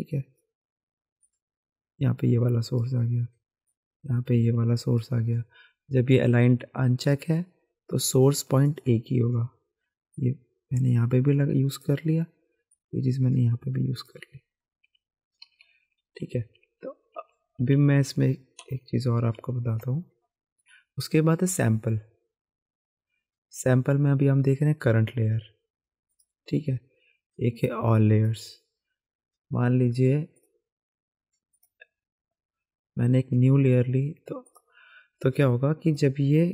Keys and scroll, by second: 14.8 ctrl+z, 15.4 ctrl+z, 15.6 ctrl+z, 15.8 ctrl+z, 16.0 ctrl+z, 16.2 ctrl+z, 16.9 ctrl+z, 17.6 ctrl+z, 18.6 typing, 18.7 ctrl+z, 19.4 ctrl+s, 20.0 typing.